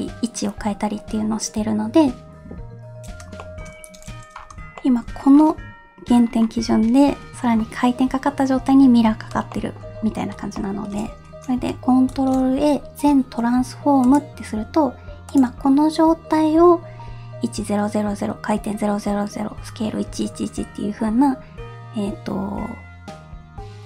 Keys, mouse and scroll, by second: 3.4 shift+middle drag, 3.7-4.5 scroll up 5, 4.8 shift+middle drag, 5.1-6.2 scroll up 1, 6.2 scroll down 2, 9.0 scroll down 2, 9.5 shift+middle click, 9.9 scroll down 1, 10.5-11.7 shift+middle drag, 12.1 ctrl+a, 15.2 click.